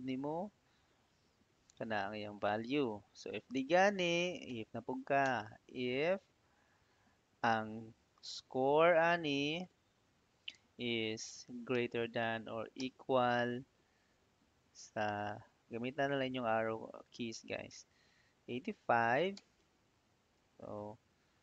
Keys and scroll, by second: 1.5 ', 3.9-4.8 typing, 5.1 Tab, 11.6 shift+., 12.6 =, 14.0 Down, 15.0 Right, 15.5 Up, 19.2 ', 20.2 Right.